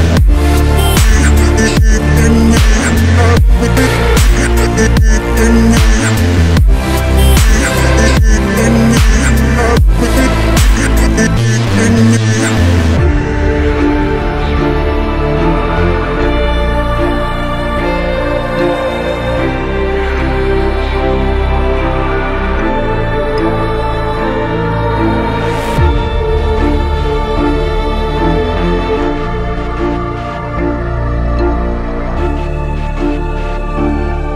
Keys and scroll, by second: 0.7 shift+Page_Up.